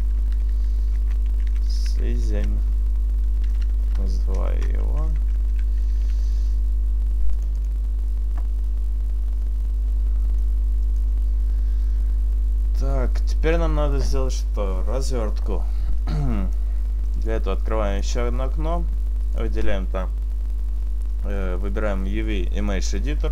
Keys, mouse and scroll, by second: 8.2 click, 9.2-9.6 scroll down 2, 10.5 middle click, 16.2 click, 17.3 click.